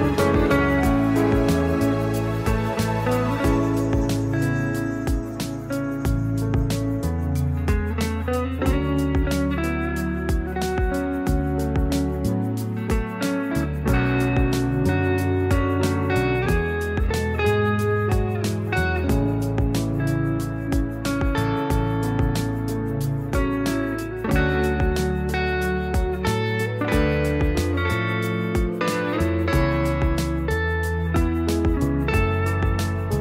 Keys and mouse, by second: 0.0 shift+click, 0.7 ctrl+KP_Subtract, 1.5 click, 3.0 ctrl+KP_Subtract, 3.5-4.1 middle drag, 4.3 shift+middle click, 4.7-5.0 middle drag, 5.3 middle drag, 5.8 shift+a, 7.0 click, 7.6 s, 8.7 s, 10.0 shift+middle click, 10.8 click, 11.6-12.0 drag, 12.2 s, 13.0-13.5 middle drag, 13.7 s, 15.8 click, 16.3 r, 17.3 r, 18.4 s, 19.3-20.3 drag, 20.7 shift+middle click, 21.0 r, 22.2 middle drag, 22.8 click, 23.6 click, 24.4-25.1 middle drag, 25.2 middle drag, 25.5 shift+click, 26.1 ctrl+KP_Subtract, 26.6-27.9 middle drag, 28.2 middle click, 29.0 middle drag, 29.4 shift+middle click, 29.6 shift+a, 30.3 middle drag, 30.8 click, 31.1 shift+middle drag, 31.7 Tab, 31.8 middle click, 32.3 e.